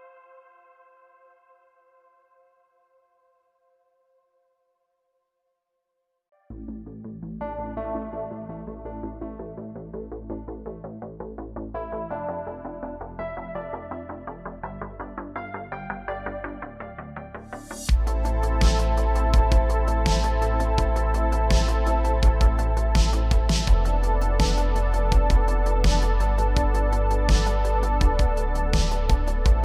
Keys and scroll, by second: 1.5 3, 9.9 Tab, 13.8 Tab, 14.3 3, 16.5 ctrl+z, 19.9 3, 24.4 Tab, 29.5 Tab.